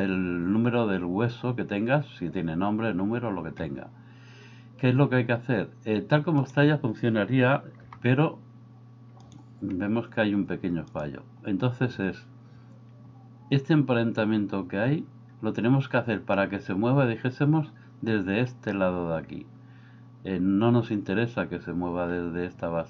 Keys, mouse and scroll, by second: 7.8 g.